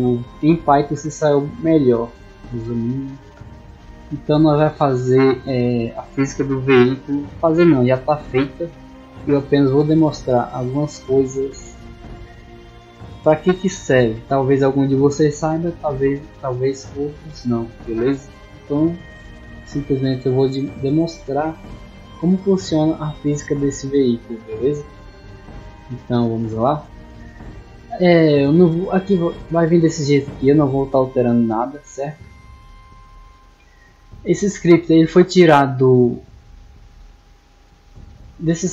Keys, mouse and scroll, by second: 25.7 click, 35.0-36.6 drag, 38.0 click.